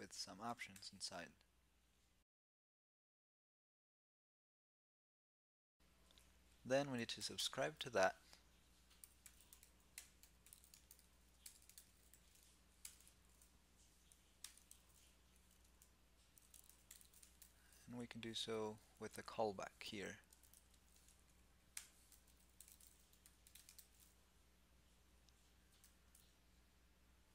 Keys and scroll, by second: 5.4 super+s, 18.5 alt+c.